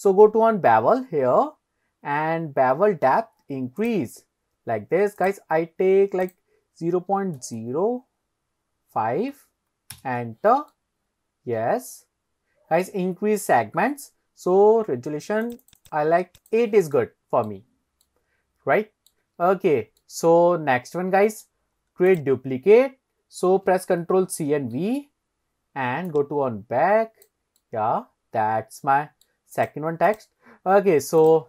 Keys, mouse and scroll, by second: 3.8 click, 5.2 click, 10.7-12.9 middle drag, 13.3-13.8 scroll up 2, 15.5 click, 15.7 click, 15.8 click, 16.4 click, 17.0-17.5 middle drag, 17.8-18.1 scroll down 2, 18.1-19.1 middle drag, 19.6 scroll up 1, 20.0-21.5 middle drag, 21.8 scroll down 1, 22.1 click, 24.5 ctrl+c, 24.8 ctrl+v, 26.1 click, 27.6-29.3 middle drag, 29.6 click, 30.1 click, 30.6-31.0 scroll up 2, 31.2 click.